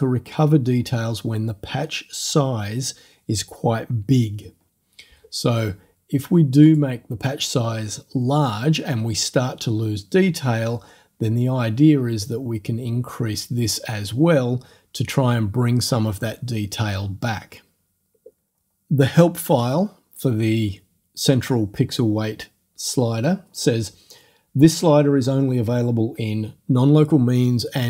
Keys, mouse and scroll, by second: 6.7 click, 12.3-14.0 drag.